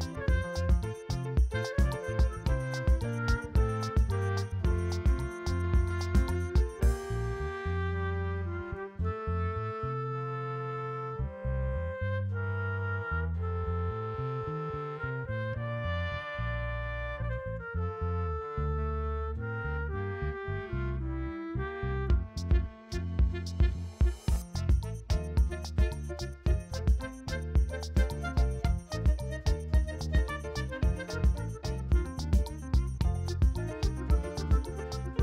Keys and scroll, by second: 0.0 v, 0.2 ctrl+space, 0.3 ctrl+space, 5.7 ], 6.3 space, 6.6 space, 7.9 [, 15.9 space, 16.6 space, 17.6 ctrl+alt+z, 18.0 v, 18.6 l, 20.2 ctrl+alt+d, 20.7 ctrl+j, 20.8 ctrl+t, 22.2 space, 22.7 space, 22.7 v, 23.3 ctrl+t, 25.9 v, 27.4 ctrl+t, 28.3 v, 29.0 ctrl+e, 29.5 [, 30.9 ctrl+alt+z, 31.4 ctrl+space, 31.6 ctrl+space, 32.1 v, 32.8 space.